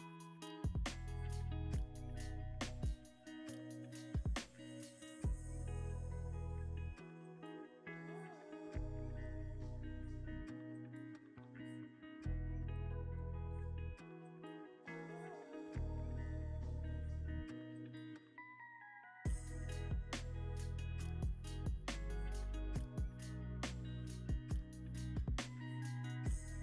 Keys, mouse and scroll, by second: 0.7 g, 0.8 z, 1.2 x, 2.8 g, 3.4 y, 6.7 scroll up 1, 7.1 middle click, 7.8 scroll up 1.